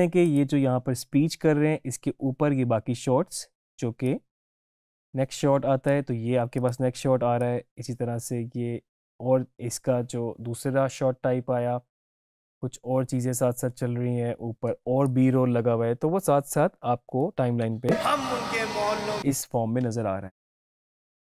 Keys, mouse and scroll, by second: 0.3 click, 4.1-17.5 drag, 17.7 space.